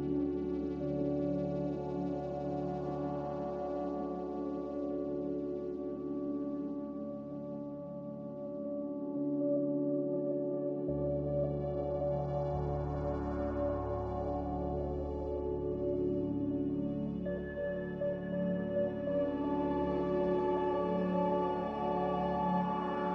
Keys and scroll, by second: 1.5 s, 2.9 5, 4.6-6.3 typing, 7.6-9.3 typing, 10.9-11.9 typing, 17.9 a, 18.6 n.